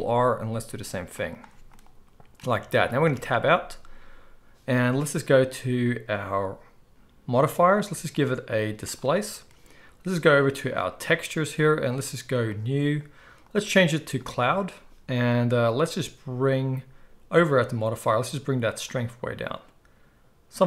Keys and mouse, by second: 3.0 Tab, 7.8-11.1 drag, 11.1-12.6 middle drag, 12.6-17.7 drag, 17.7-18.8 middle drag, 18.8-20.6 drag.